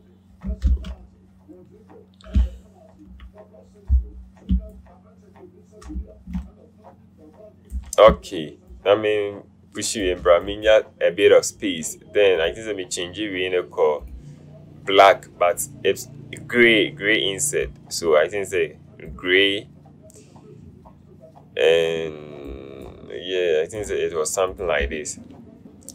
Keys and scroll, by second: 0.8 ctrl+z.